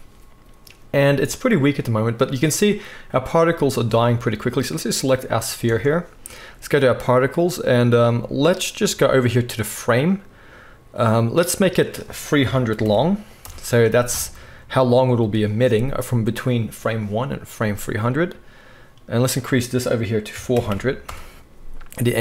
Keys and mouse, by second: 4.3-11.6 right drag, 5.6 space, 11.6-22.2 middle drag, 12.8 0, 20.7 0.